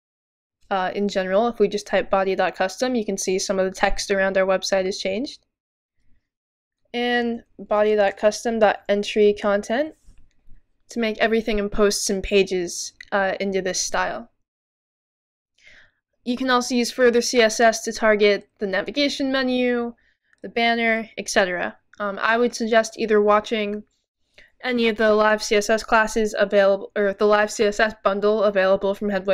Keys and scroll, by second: 0.0-0.5 typing, 6.5-9.9 typing.